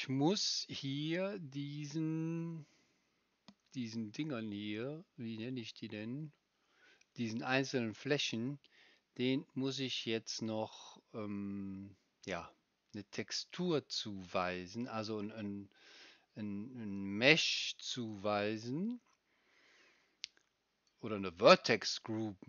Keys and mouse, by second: 18.1-21.0 drag.